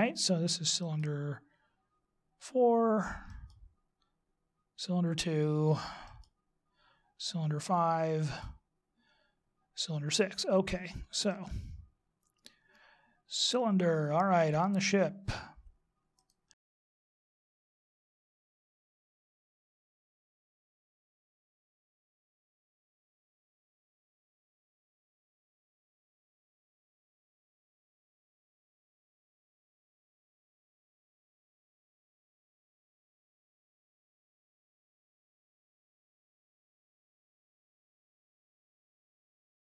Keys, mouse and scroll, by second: 1.8 right click, 4.3 right click, 6.9 right click, 9.2 right click, 12.3 right click, 14.7 right click, 16.1 click, 17.0 click, 17.1 click, 17.5 click, 18.4 right click, 18.8 g, 19.4 click, 19.6 ctrl+z, 21.3 right click, 21.6 click, 22.2 right click, 22.4 g, 22.9 x, 23.6 right click, 24.0 right click, 24.2 click, 24.6 click, 24.8 click, 25.1 click, 26.0 click, 26.7 right click, 27.1 click, 27.4 x, 27.9 right click, 28.3 right click, 28.4 click, 29.3 click, 29.6 click, 30.5 click, 31.1 right click, 31.5 g, 31.8 x, 32.6 right click, 32.8 right click, 33.2 click, 33.6 click, 33.8 click, 34.1 click, 34.9 click, 35.5 right click, 35.7 g, 36.1 x, 36.7 right click, 37.0 right click, 37.1 click, 37.8 click, 38.0 click, 38.3 click, 39.4 click.